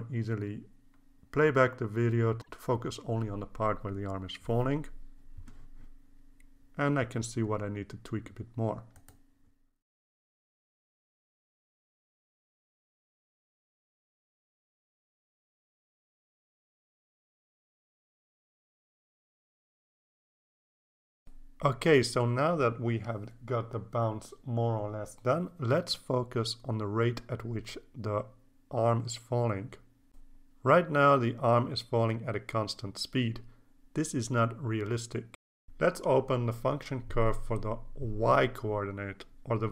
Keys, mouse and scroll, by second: 2.3 click, 3.2-3.5 scroll down 1, 4.2 scroll up 1, 5.1 click, 6.0-9.5 drag, 10.4 click, 10.5 click, 11.1 click, 12.5-13.7 drag, 14.1 scroll down 1, 14.6 click, 15.4 click, 16.1 click, 16.7 click, 17.6 click, 18.3-19.9 drag, 20.7 click, 28.1-36.1 drag, 37.0 click, 37.8 click, 39.1 click, 39.6 click.